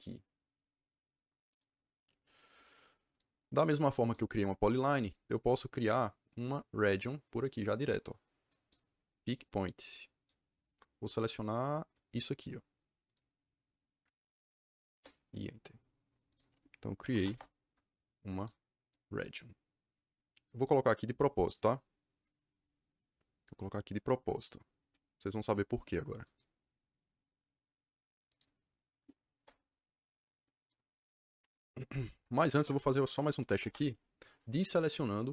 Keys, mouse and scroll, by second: 1.4 click, 3.1 click, 5.8 click, 6.7 click, 8.4 click, 13.0 click, 14.8 KP_Enter, 16.2 click, 16.7-17.7 typing, 18.3 click, 26.2 click, 28.2 click, 29.3 KP_Enter, 32.3 Escape, 33.3 b, 33.6 Return.